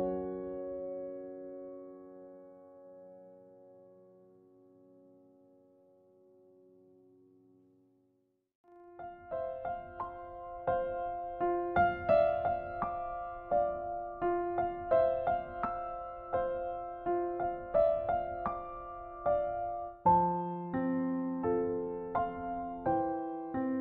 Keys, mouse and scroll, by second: 1.6 click, 6.8 click, 8.3 Delete, 9.1 click, 9.8 Delete, 10.3 click, 10.7 right click, 15.9-17.5 scroll up 1, 17.5 click, 18.1 right click, 20.0 click, 21.5 click, 23.7 Tab.